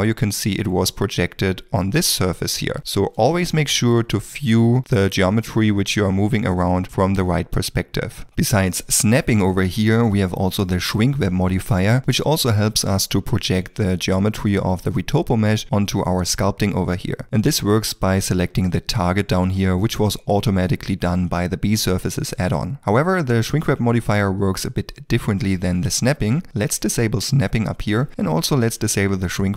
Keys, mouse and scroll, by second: 0.5 ctrl+middle click, 1.0 middle click, 2.8 ctrl+z, 3.4 middle click, 4.1 ctrl+middle click, 4.7 shift+middle click, 5.5 middle click.